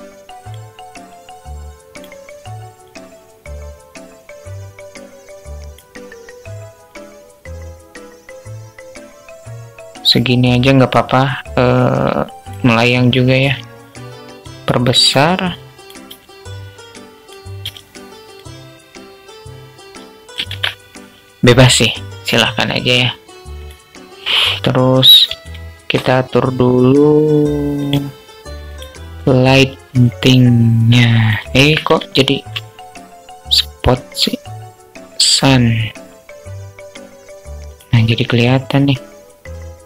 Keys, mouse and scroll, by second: 0.5 click, 2.2-5.1 drag, 5.9-10.0 drag, 11.0 click, 14.4 click, 18.8-19.8 drag, 19.9 ctrl+z, 24.8 shift+a, 29.5-30.6 drag, 30.9 ctrl+z, 31.3 shift+a, 37.0 click, 38.9-39.8 drag.